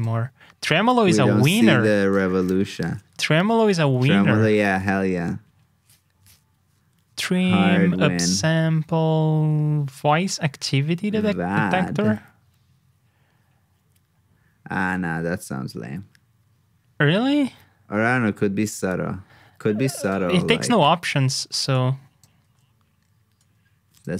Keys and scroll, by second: 2.6 alt+shift+Down, 4.0 super+Tab, 20.4 super+c, 20.6 super+Tab, 22.4 super+v.